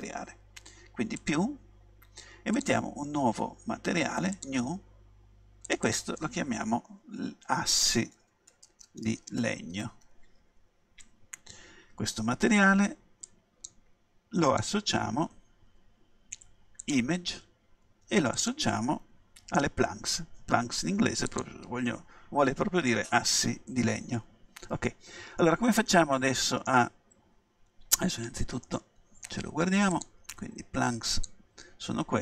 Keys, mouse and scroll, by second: 1.2-8.2 drag, 8.2 s, 13.3-16.4 drag, 18.4-20.5 drag, 25.4-27.8 middle drag, 28.7-29.9 middle drag, 29.9-31.9 drag, 31.9-32.2 scroll up 1.